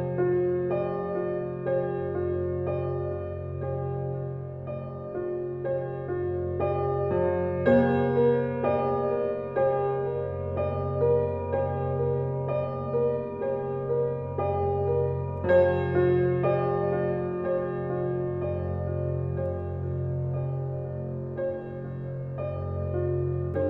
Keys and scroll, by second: 13.7 Left, 19.7 ctrl+c, 23.0 2, 23.1 0.